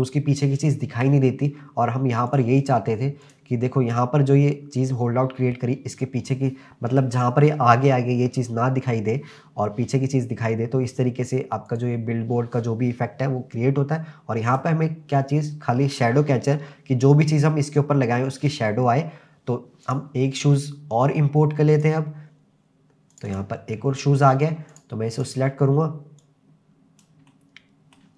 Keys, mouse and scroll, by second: 2.3 click, 3.5 click, 11.7 click, 14.5 click, 19.9-22.0 drag, 24.7 click, 25.2 click, 26.2 click, 27.3-28.0 middle drag.